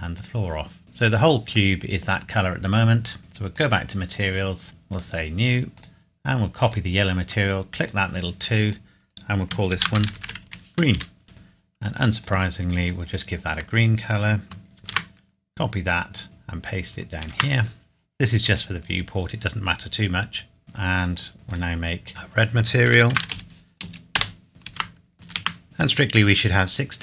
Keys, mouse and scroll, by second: 0.8 middle click, 3.5 click, 4.3-4.9 scroll up 1, 4.9 click, 9.7-10.4 typing, 10.9 Return, 12.2 click, 14.8 ctrl+c, 15.3 scroll down 1, 17.2 ctrl+v, 20.6 click, 23.1 typing, 24.2 Return, 24.5 click, 24.6 ctrl+c, 25.0 scroll down 1, 25.1 ctrl+v, 25.6 click.